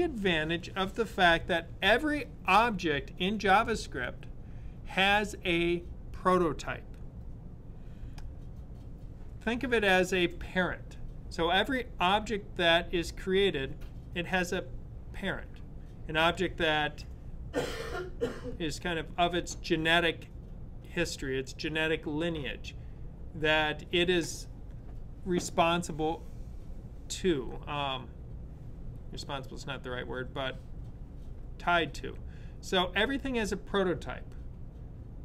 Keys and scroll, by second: 0.1 super+/.